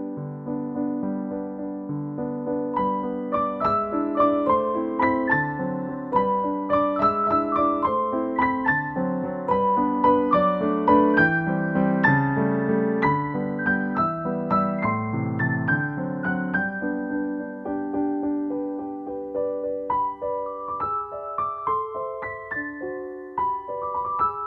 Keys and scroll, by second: 3.4-4.0 scroll up 1, 4.4 scroll down 1, 4.7 scroll up 1, 5.7 scroll up 1, 6.0-6.5 scroll down 1, 6.6 scroll up 1, 7.7-8.3 scroll up 1, 9.3 scroll down 1, 14.3-14.7 scroll down 1, 14.7 scroll up 1, 19.1 scroll down 1, 21.8 scroll down 1, 22.1 scroll up 1, 22.6 scroll down 1, 22.9 scroll up 1.